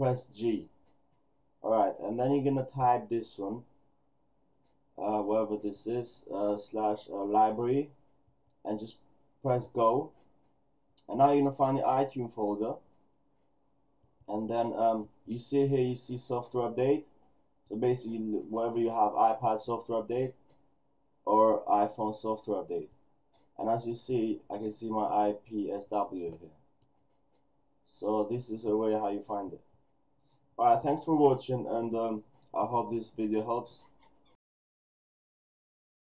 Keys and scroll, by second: 0.6 shift+super+g, 32.9 super+w.